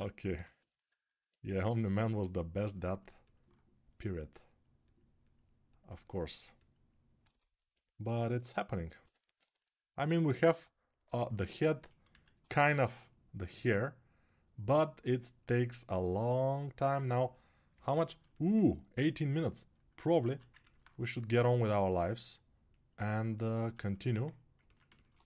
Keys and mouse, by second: 0.1 g, 7.9 alt+q, 8.8-17.5 right drag, 8.8 g, 9.1 ], 9.6 ], 9.7 ], 11.9 alt+q, 20.0 alt+q, 25.1 ctrl+Tab.